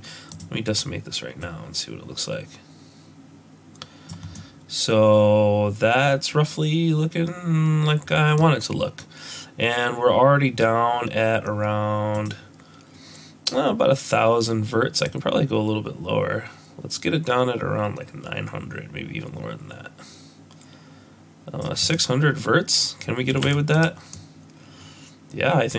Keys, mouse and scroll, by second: 1.4 click, 4.3 middle click, 12.1 click, 15.0 click, 21.9 middle click, 23.4 z, 24.1 middle click.